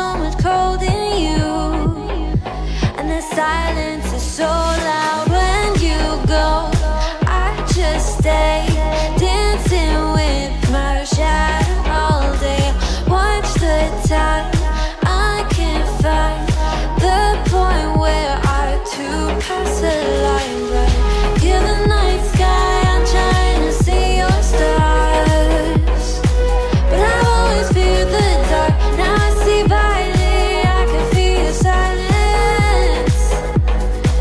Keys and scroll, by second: 13.3 ctrl+t, 19.0 ctrl+t.